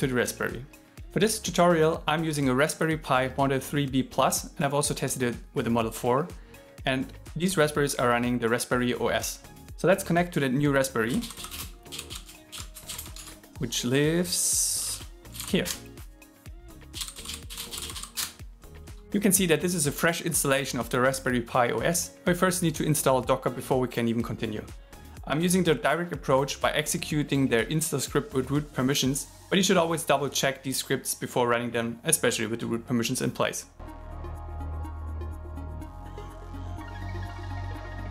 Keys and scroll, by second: 12.5 alt+l, 35.6-37.6 typing.